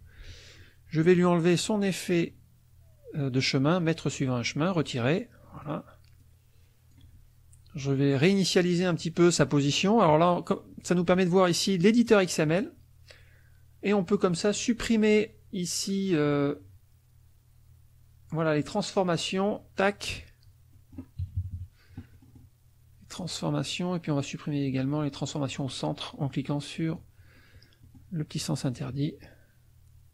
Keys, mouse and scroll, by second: 1.1 click, 4.7 click, 5.6 click, 6.2 click, 8.9 click, 9.3 click, 11.1 click, 12.0 click, 19.4 click, 20.7 middle click, 20.7-21.3 scroll down 1, 21.2 KP_Subtract, 23.2 click, 25.5 click, 26.2 click, 26.9 click, 27.3 middle click, 28.7-30.1 drag.